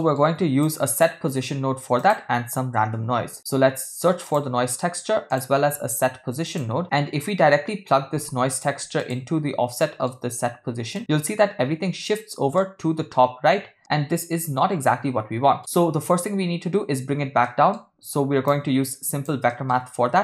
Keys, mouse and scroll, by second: 0.6-1.0 drag, 1.4 shift+a, 5.8 shift+a, 9.8 middle click, 10.9-12.3 drag, 12.6-13.1 middle drag, 13.8-15.6 middle drag, 17.4 middle click, 18.5-19.3 drag, 19.5 middle click, 20.1 shift+a.